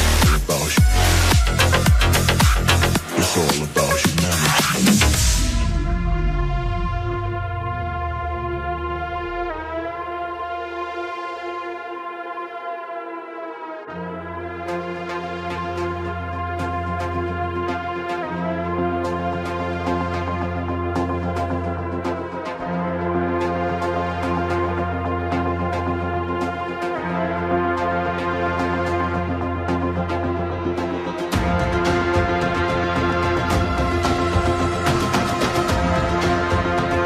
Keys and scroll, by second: 10.3 Return.